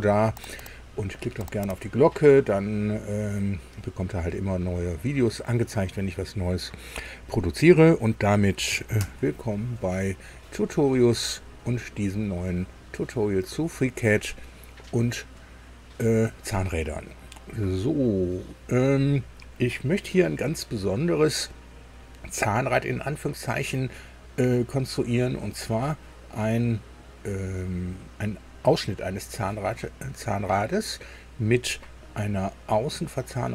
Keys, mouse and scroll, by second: 9.0 super+i.